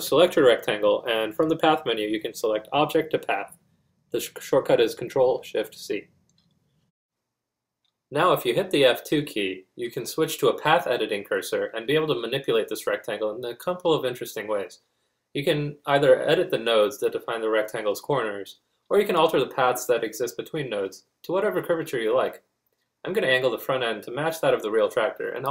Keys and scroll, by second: 7.0 F2, 20.7 z, 21.0 z.